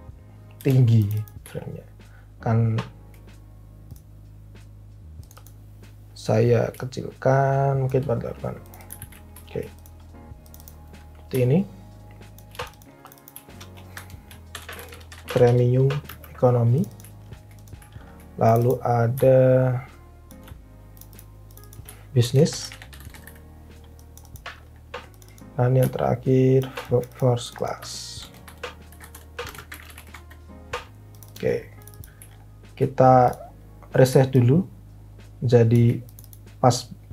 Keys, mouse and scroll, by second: 0.5 Delete, 8.9 alt+v, 13.9 Left, 14.2-15.9 typing, 20.9-23.7 typing, 23.9 click, 27.9-30.7 typing.